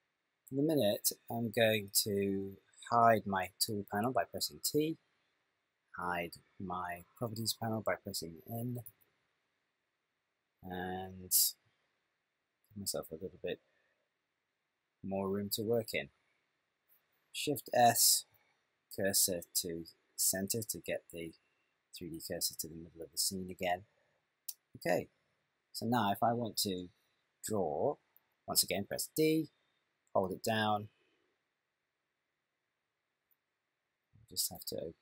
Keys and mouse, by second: 4.7 t, 8.9 n, 12.4 shift+middle click, 18.2 shift+s, 29.2-30.8 d, 30.9 click, 32.9 d, 33.0 d, 33.1 d, 33.2 d, 34.6 t.